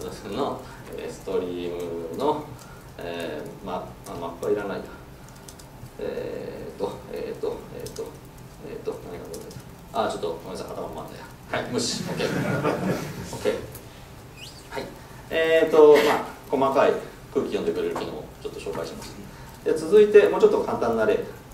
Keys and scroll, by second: 10.3 Escape.